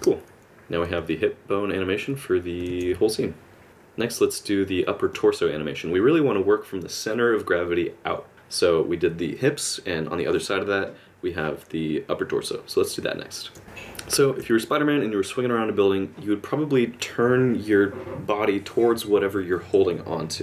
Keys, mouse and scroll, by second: 1.1 middle click, 2.7 alt+a, 13.6 alt+space, 13.6 click, 13.6 middle click.